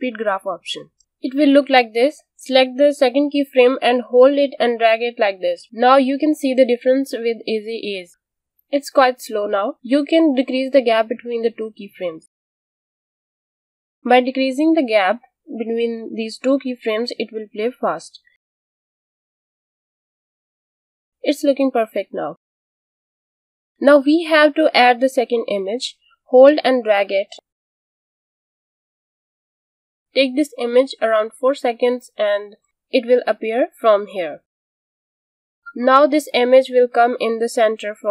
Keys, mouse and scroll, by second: 2.2 click, 9.3 space, 9.6 space, 10.0 click, 11.6 space, 14.8 space, 15.1 click, 19.3 space, 23.0 click, 25.3 click, 30.6-31.5 alt+scroll down 2, 31.5 click, 31.9 click, 36.9 click.